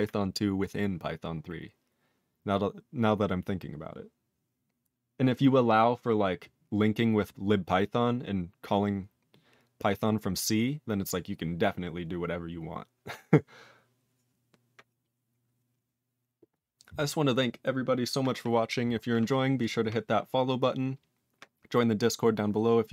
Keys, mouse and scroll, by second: 19.6 click, 19.7 click.